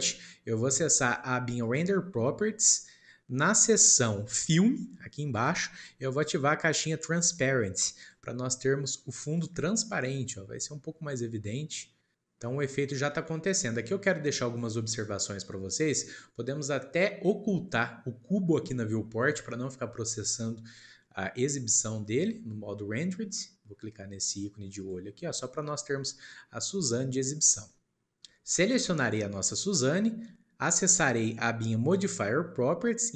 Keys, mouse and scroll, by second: 1.5 click, 3.3 scroll down 2, 5.3-5.9 drag, 5.9-7.9 scroll down 1, 7.9 click, 10.7-11.1 scroll up 1, 11.1-12.3 middle drag, 11.8-12.5 scroll up 2, 12.9-13.3 scroll down 1, 13.3-18.6 middle drag, 24.8 click, 25.6 middle click, 26.1-27.1 scroll up 2, 27.1 click, 27.9 click, 29.4 click, 31.8 click.